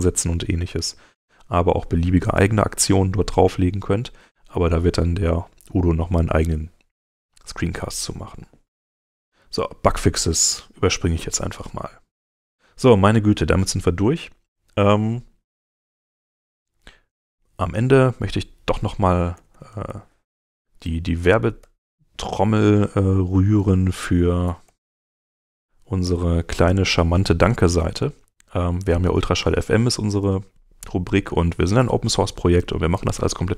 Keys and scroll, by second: 16.0 super+t, 19.1-20.4 typing, 21.6 Return, 24.2-25.7 typing, 26.0 Return.